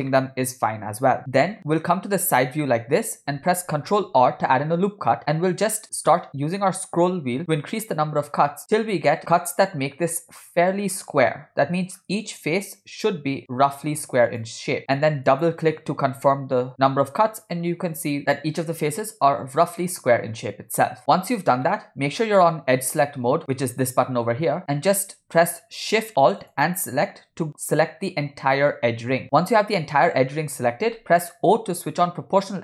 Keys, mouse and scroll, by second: 0.3-2.3 middle drag, 1.3 Tab, 2.6 scroll up 3, 4.2 ctrl+r, 16.7-17.2 scroll up 7, 17.8 scroll down 1, 21.9 middle click, 22.7 scroll up 1, 24.8 click, 26.6 alt+shift+click, 31.5 o.